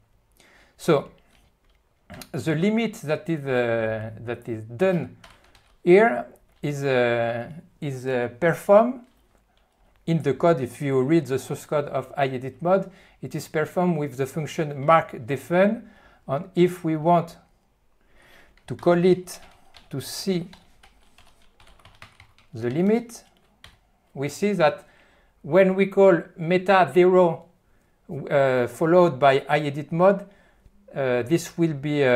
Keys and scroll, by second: 5.4 a, 5.7 q, 18.8 alt+:, 19.2 ., 23.2 ., 23.8 Return.